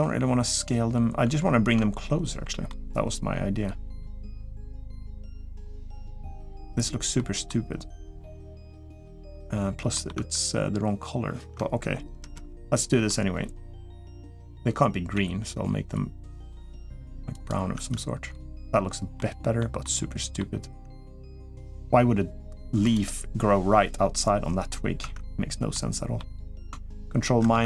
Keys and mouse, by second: 2.4-3.8 middle drag, 4.1 Tab, 4.7 middle click, 6.0 middle click, 6.9 middle click, 7.9 middle click, 8.8 middle click, 9.7 middle click, 10.3 Tab, 12.0 ctrl+KP_Add, 12.3 ctrl+KP_Add, 14.9 g, 16.4 g, 17.5 Tab, 18.9-19.4 middle drag, 19.6-20.2 middle drag, 24.8 Tab, 25.5 middle click, 27.2 ctrl+KP_Subtract.